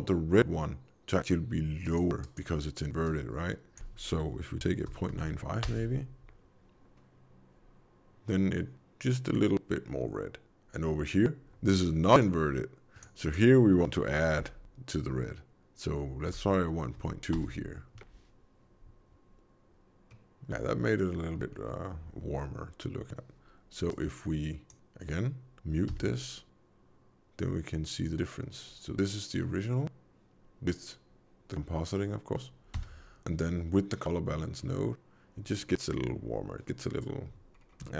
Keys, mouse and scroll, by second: 12.1 click, 20.0 middle click, 21.4-23.0 scroll down 1, 23.0-23.9 scroll down 1, 23.9 click, 25.9 m, 32.7 m, 37.5 scroll down 2.